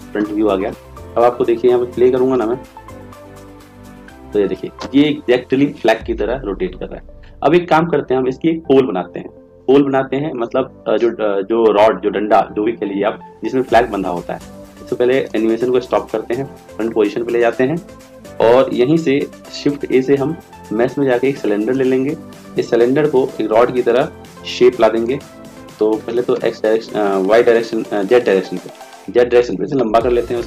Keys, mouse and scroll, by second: 18.6-19.6 middle drag, 19.6 shift+a.